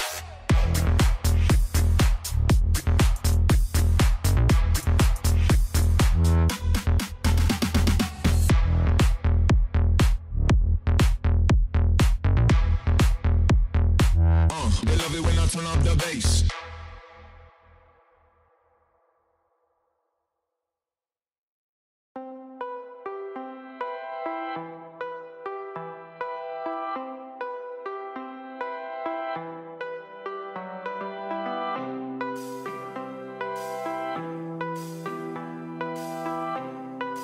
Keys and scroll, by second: 0.0-1.9 typing, 11.2 j, 19.1-21.0 typing, 28.8 j.